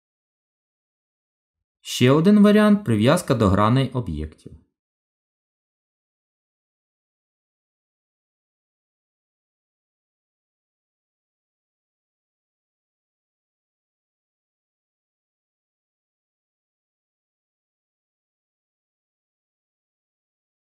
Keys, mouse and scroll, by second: 1.3 click, 1.3 click, 5.7 middle click, 8.8 g, 19.3 middle click.